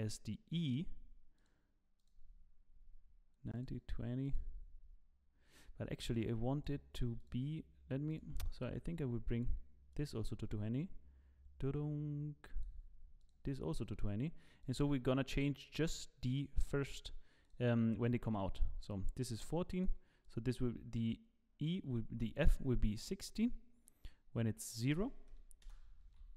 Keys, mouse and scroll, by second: 0.6 click, 1.4 click, 2.1 click, 3.6 click, 4.3 click, 6.7 click, 7.2 click, 8.1 click, 8.5 click, 12.4 click, 13.2 click, 14.6 click, 17.5 click, 19.3 click, 20.5 click, 22.3 click, 25.4 click, 25.6 Delete, 26.0 i.